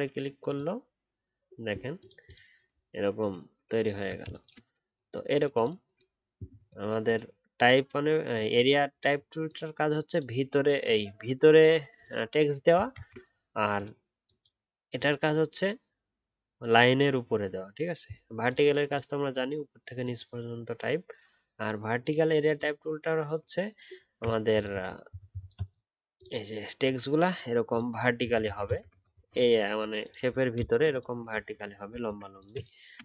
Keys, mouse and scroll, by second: 2.8 alt+scroll down 1, 3.9 alt+scroll up 1, 12.9 ctrl+z, 24.0-24.5 alt+scroll up 1, 24.5 ctrl+click, 28.1-28.6 alt+scroll down 1, 28.6-31.3 alt+scroll up 1, 31.3 alt+scroll up 1, 32.0 alt+scroll down 1.